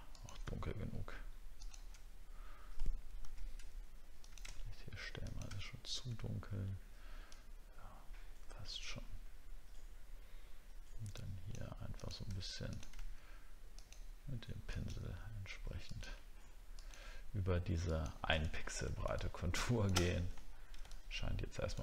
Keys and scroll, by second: 18.5 alt+scroll down 1, 20.4 alt+scroll down 1.